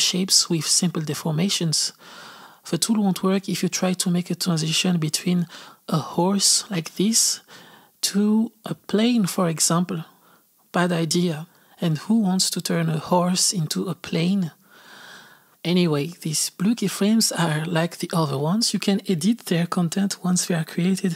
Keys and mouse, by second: 2.7-4.7 drag, 5.2-6.3 drag, 6.3 z, 6.8-18.0 drag, 18.5-21.1 drag.